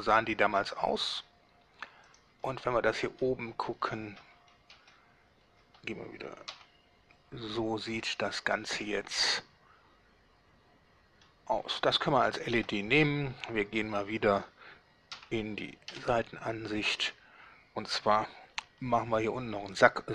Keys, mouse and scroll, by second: 2.2 drag, 2.6-3.4 middle drag, 3.8-4.2 scroll up 2, 4.4 scroll down 2, 4.8 Tab, 5.6 Tab, 6.6 z, 8.0 scroll up 2, 8.9-11.4 middle drag, 11.6 scroll down 2, 12.6 Tab, 15.2 z, 16.0 1.